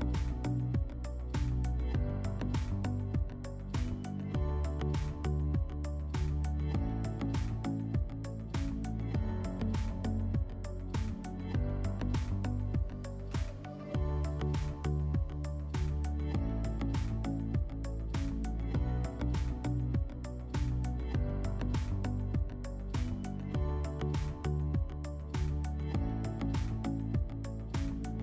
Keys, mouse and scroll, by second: 1.3 /, 3.0-5.7 drag, 8.8-10.2 drag, 14.2 click, 14.9 click, 16.2-22.3 drag, 22.6 click, 25.4 click, 26.4 click.